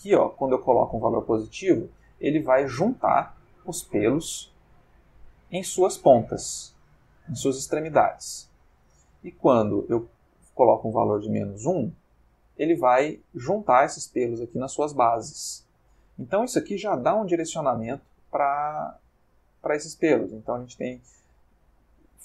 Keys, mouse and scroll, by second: 2.2-3.2 middle drag, 4.0 ctrl+middle click, 4.5-5.9 ctrl+middle drag, 10.0-12.6 drag, 13.1-13.9 middle drag, 14.0-14.7 ctrl+middle drag, 15.0-20.6 ctrl+middle drag.